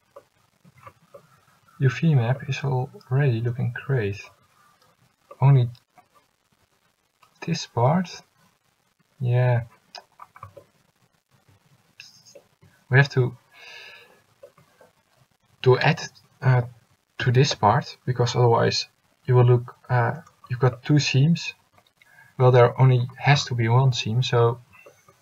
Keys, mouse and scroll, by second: 24.5 middle click.